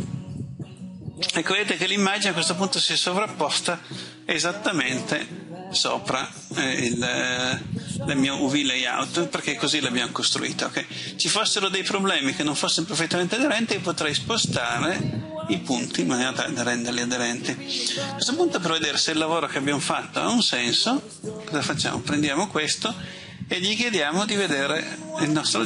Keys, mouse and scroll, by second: 21.5 click.